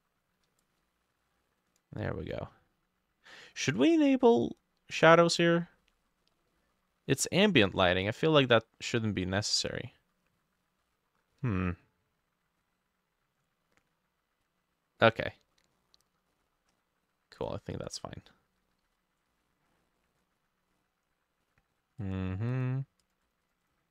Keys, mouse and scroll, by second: 2.1 middle click, 5.2-5.8 scroll down 11, 5.8 middle click, 6.5 middle click, 7.4 middle click, 8.3 middle click, 9.5 middle click, 11.3 middle click, 15.0 middle click, 15.8 middle click, 16.4-17.1 scroll up 9, 18.9 ctrl+d, 23.3 double click, 23.5 double click, 23.7 double click.